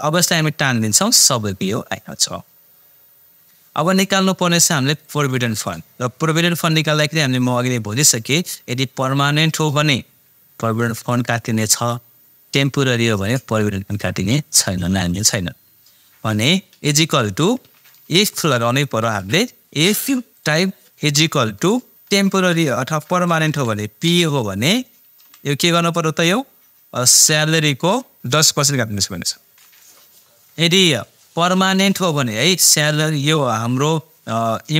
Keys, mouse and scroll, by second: 5.0 click, 17.2-19.0 typing, 20.3 click, 21.7-24.0 typing, 25.2 ,, 27.5 click.